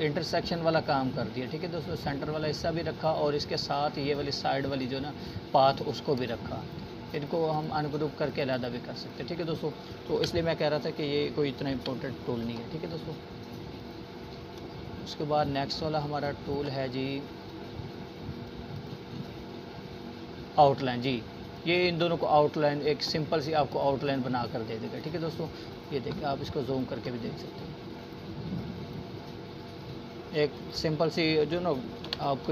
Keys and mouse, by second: 4.0 alt+right click, 4.8 alt+click, 6.6 alt+Delete, 7.2-7.9 alt+click, 8.2 alt+Delete, 10.3 alt+click, 11.5-12.2 alt+shift+drag, 17.6-18.3 drag, 22.5 z, 23.0-23.6 drag, 28.5 Delete.